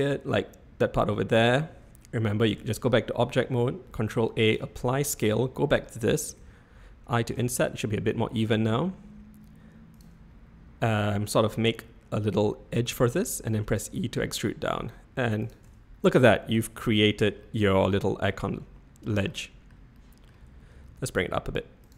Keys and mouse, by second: 2.5 Tab, 4.0 ctrl+a, 5.2 Tab, 6.4 i, 13.5 e, 15.6 Tab, 16.1 middle click, 17.4 middle click, 19.3 middle click, 19.9-20.2 middle drag, 20.6 g.